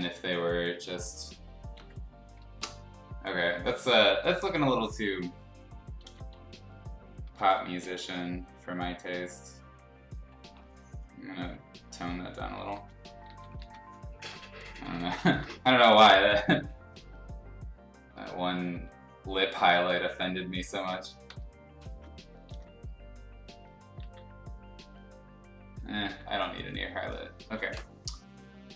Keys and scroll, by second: 1.7 x, 2.5 Return, 3.5-5.1 typing, 6.0 ctrl+z, 6.3 x, 7.4 ctrl+z, 12.7 ctrl+z, 13.2 ctrl+z, 13.6 ctrl+z, 14.3 x, 15.3-16.2 typing, 18.7 [, 20.0 [, 20.8 [, 21.3 ], 22.5 ctrl+z, 24.0 ctrl+z, 26.0 e, 27.4 ctrl+z.